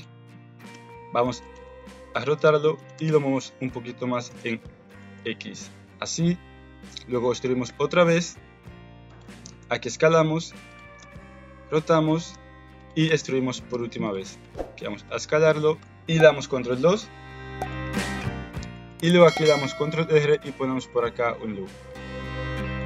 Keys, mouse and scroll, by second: 0.7 e, 1.6 ctrl+z, 2.1 r, 3.0 g, 4.4 alt+z, 5.1 shift+click, 7.6 e, 9.2 s, 10.9 r, 13.0 e, 14.3 s, 15.6 middle click, 15.8 Tab, 17.5 click, 18.9 middle click, 19.5 ctrl+r.